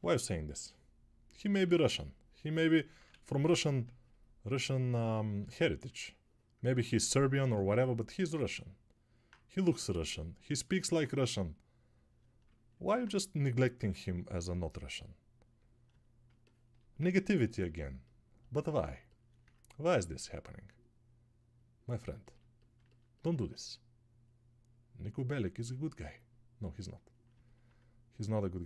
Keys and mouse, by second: 3.2 ctrl+z.